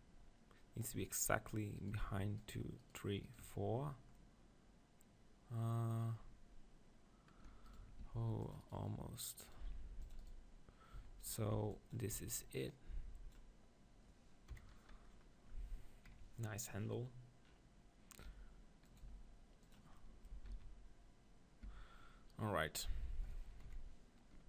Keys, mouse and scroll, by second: 1.8-5.0 right drag, 4.2-7.7 middle drag, 7.7-9.7 right drag, 8.0 ctrl+r, 9.7 ctrl+r, 11.0 z, 11.4 b, 12.1 b, 14.6 KP_7, 16.1 ctrl+KP_7, 17.1 middle click, 18.2 e, 19.0-21.4 drag, 19.2 s, 20.4 Tab, 20.5 z, 21.7 Tab, 23.7 KP_7.